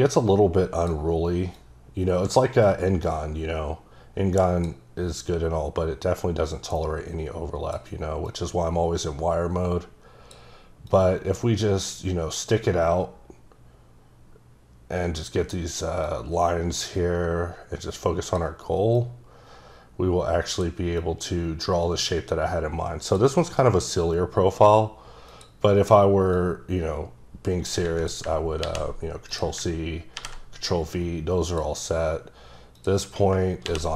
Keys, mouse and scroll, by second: 1.6 click, 5.1 click, 8.3 click, 10.9 click, 16.0 click, 18.9 click, 21.0 click, 23.9-25.3 scroll down 1, 25.3 click, 26.4 click, 28.8 ctrl+c, 29.3 click, 30.2 ctrl+v, 31.5 click, 32.8 click, 33.6 ctrl+c.